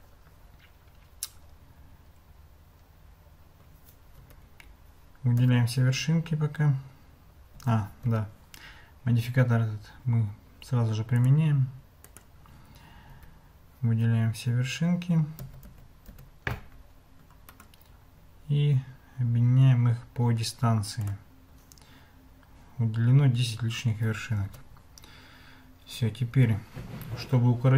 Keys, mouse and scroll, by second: 4.2 Tab, 5.4 a, 7.6 a, 8.1 Tab, 11.1-12.2 drag, 13.1 Tab, 15.4 a, 15.7 a, 16.1 a, 17.5-21.1 drag, 24.5 Tab.